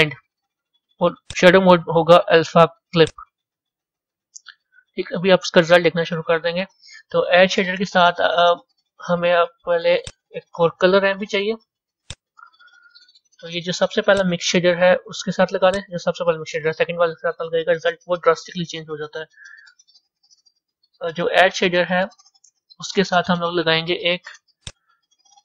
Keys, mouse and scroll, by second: 4.4 a, 4.8-14.1 middle drag, 16.5 click.